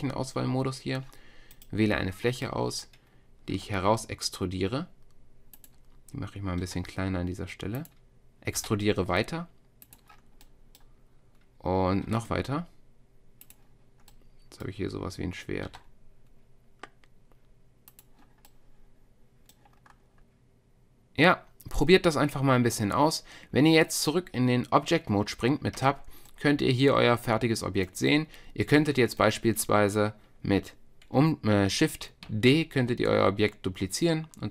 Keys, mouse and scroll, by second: 1.5-3.6 drag, 3.6 e, 6.6 s, 8.6 e, 10.2 click, 10.5-11.7 middle drag, 11.7 click, 12.0-15.4 drag, 12.1 e, 15.6 s, 25.8 Tab, 32.3 shift+d.